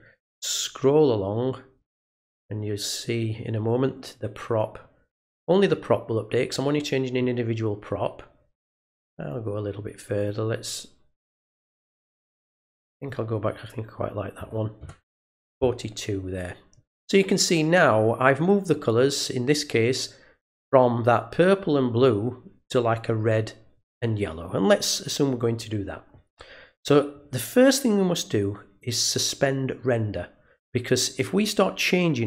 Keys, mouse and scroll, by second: 9.2 click, 12.3 click, 28.8 click.